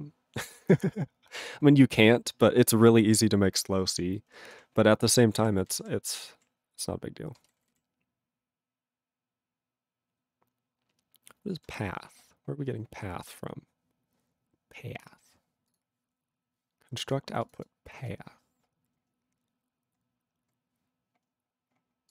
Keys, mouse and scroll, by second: 4.6-5.3 ctrl+p, 5.3 ctrl+e, 5.7 ctrl+n, 5.8 ctrl+e, 6.4 ctrl+a, 7.4 ctrl+space, 7.4 ctrl+n, 7.6 ctrl+n, 7.7 ctrl+n, 12.3-12.9 scroll up 7, 13.1-13.7 scroll up 6, 15.7 click, 15.7 click, 17.0 click, 17.1 click, 17.5 click, 17.5 click, 17.5 click, 17.6 double click, 17.9 click, 17.9 click, 18.0 click, 18.1 double click, 18.6-19.7 scroll up 12, 19.7 scroll up 1, 20.1-20.8 scroll down 14, 20.8 scroll, 21.2-22.1 scroll up 26.